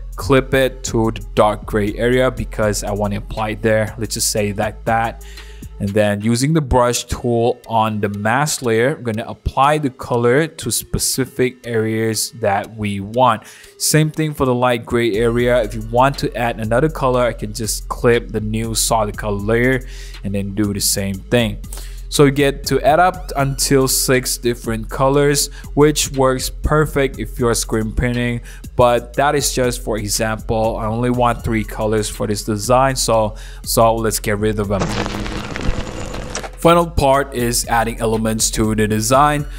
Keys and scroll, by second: 6.7 ], 13.7 ], 21.3 v, 21.6 super+0, 21.9 super+-, 22.1 super+-, 22.4 super+1, 22.7 super+0, 22.9 super+-, 24.8 BackSpace, 25.0 BackSpace, 25.6 super+z, 28.9 super+c, 29.7 BackSpace, 31.0 super+v, 34.4 super+0, 34.6 super+-, 34.8 super+-.